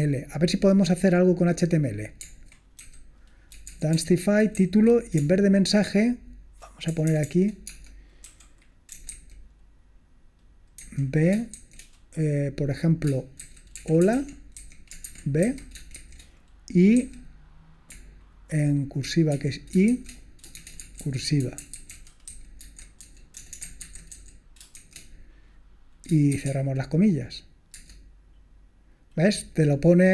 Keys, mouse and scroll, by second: 3.4-9.1 typing, 4.5 Right, 10.9 b, 12.7-17.0 typing, 19.3-24.8 typing, 26.6 typing, 27.8 Return.